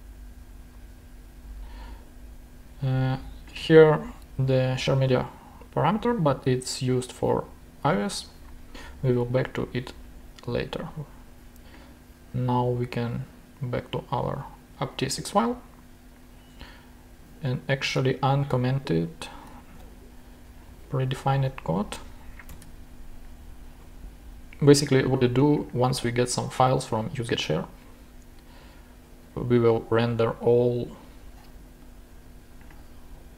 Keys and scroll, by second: 19.8 super+/, 22.5 super+/.